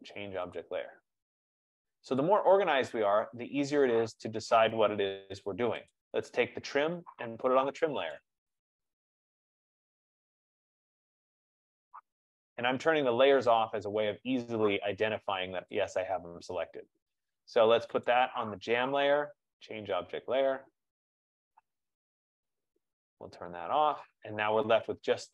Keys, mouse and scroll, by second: 0.7 click, 2.4 click, 3.8-4.6 scroll, 6.2 click, 7.7 middle click, 8.3 right click, 10.6 click, 12.3 click, 14.8-15.4 scroll, 15.4 F15, 15.9 click, 18.0 click, 18.4 right click, 20.6 click, 23.7 click, 25.2 scroll.